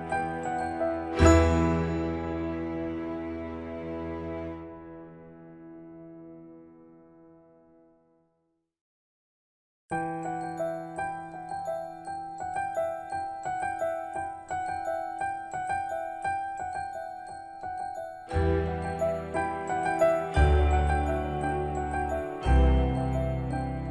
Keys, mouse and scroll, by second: 2.7-3.5 scroll up 1, 6.1 l, 7.5 click, 15.8 click, 22.6-23.6 typing.